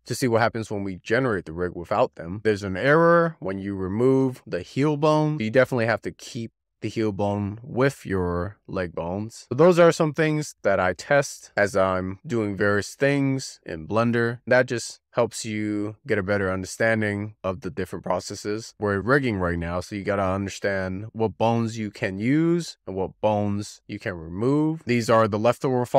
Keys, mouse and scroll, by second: 0.5 click, 0.7 x, 0.9 scroll down 2, 1.1 scroll up 2, 1.3 shift+middle click, 1.7 click, 2.0 scroll down 30, 2.2 scroll up 1, 2.9-5.9 drag, 7.3-9.4 drag, 9.9-15.5 scroll down 2, 24.8 click, 25.1 x, 25.7 click.